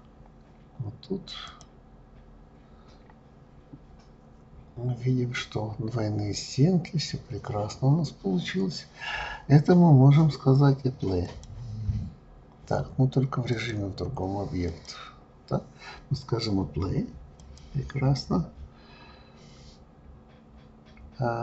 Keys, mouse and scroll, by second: 1.5 click, 4.5-6.4 scroll down 3, 11.2-16.5 drag, 17.4-20.4 drag.